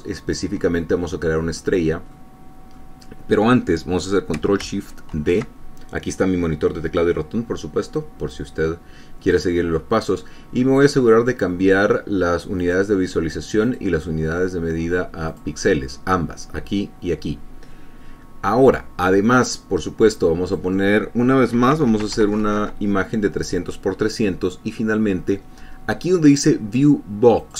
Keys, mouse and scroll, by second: 0.3-0.7 ctrl+scroll up 2, 1.0-2.3 ctrl+drag, 2.3 click, 5.4 ctrl+shift+d, 8.5-9.8 drag, 11.1 click, 12.8 click, 13.9 click, 15.5 click, 20.5 click, 21.8 KP_3, 22.0 KP_0, 22.3 Tab, 22.4 KP_3, 22.5 KP_0, 22.8 KP_Enter.